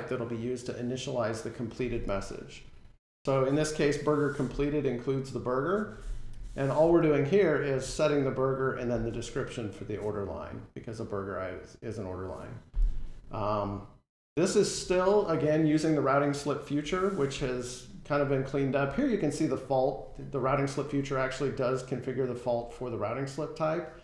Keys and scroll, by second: 3.6 F12, 16.7 F12.